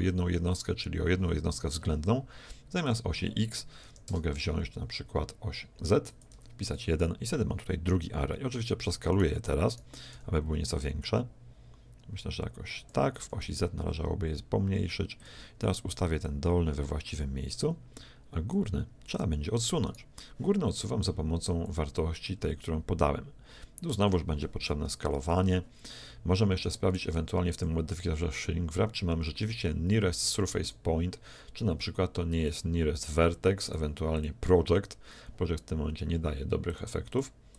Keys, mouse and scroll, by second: 2.9-4.8 drag, 6.1-7.9 drag, 9.2-11.6 right drag, 10.1 s, 13.2 s, 16.2-18.1 drag, 19.2-21.8 right drag, 21.7-23.3 drag, 24.9 KP_1, 25.3 z, 27.5-29.3 drag, 30.6-32.5 drag, 33.6-35.5 drag, 36.7-37.5 drag.